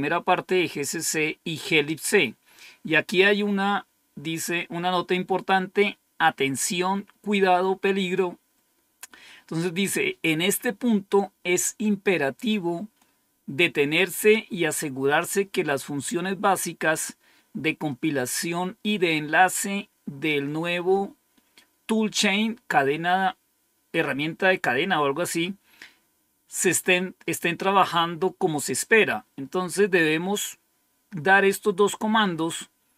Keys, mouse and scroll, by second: 6.6-7.3 scroll down 1.